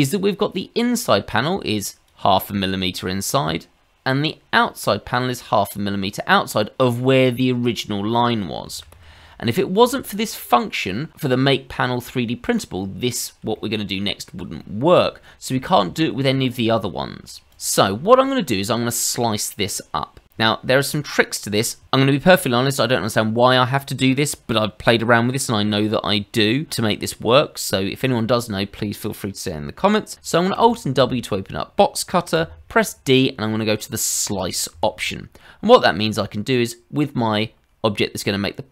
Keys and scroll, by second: 8.7 ctrl+z, 8.9 ctrl+z, 9.1 ctrl+z, 9.3 ctrl+z, 9.8 ctrl+z, 30.5 alt+w, 32.3 d.